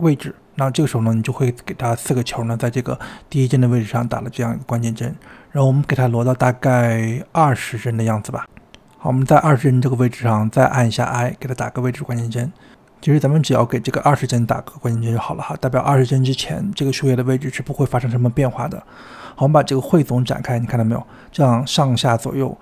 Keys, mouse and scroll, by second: 3.6-12.5 drag, 12.5 i, 15.8-19.9 drag, 19.9-20.6 scroll down 4, 20.6-22.3 scroll up 4, 22.3-22.6 drag.